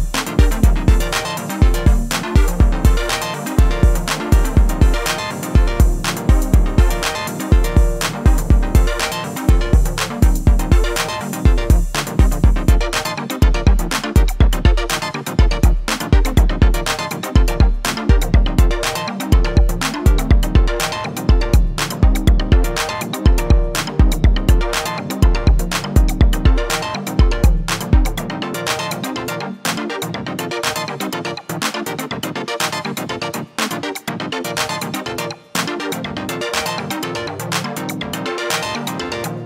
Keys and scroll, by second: 0.4 r, 1.0 x, 28.4 r, 29.3 x.